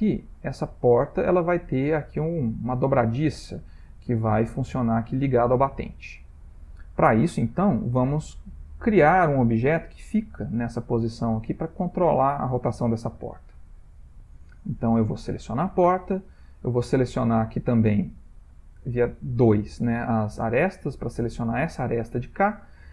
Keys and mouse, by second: 3.9 shift+middle click, 5.1 shift+middle click, 14.5 click, 15.9 Tab, 16.7 click, 18.5 click, 20.6 click, 22.6 shift+middle click.